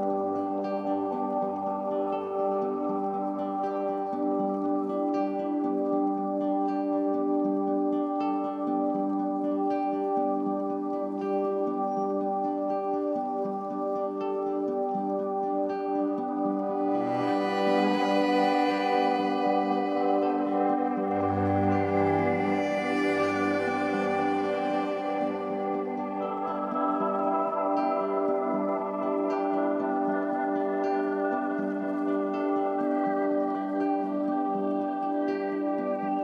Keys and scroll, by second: 16.6 ctrl+z, 29.4 alt+space.